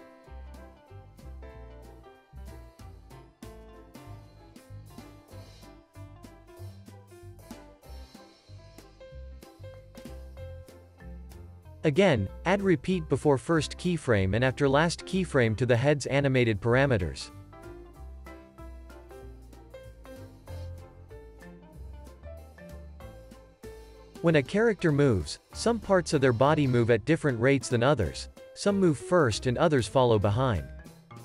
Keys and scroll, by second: 3.8 super+c, 4.0 super+v, 4.5 super+s, 5.5 super+c, 6.4 super+v, 6.8 super+s, 9.3 super+s, 30.3 super+s.